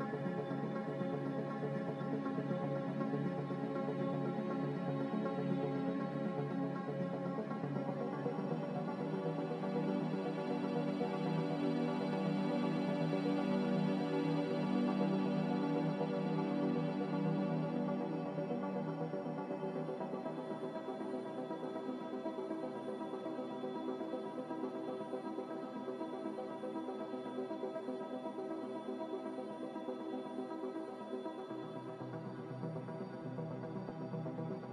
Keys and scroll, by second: 1.8 a, 3.3 f, 4.2 f, 6.4 z, 11.5 n, 13.4 m, 17.1 a, 19.8 m, 21.5 Escape.